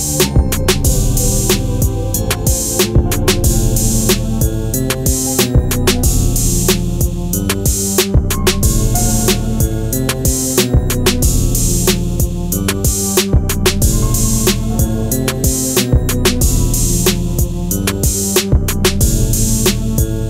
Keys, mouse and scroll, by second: 0.9 scroll up 1, 4.5 scroll down 1, 4.7 click.